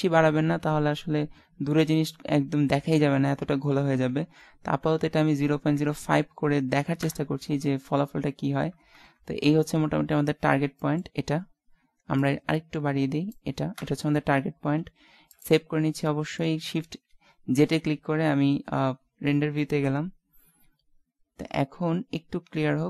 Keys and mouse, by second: 7.0 KP_0, 9.0 KP_0, 10.4 middle click, 12.2 middle click, 13.8 KP_0, 15.2 ctrl+s, 16.9 shift+z.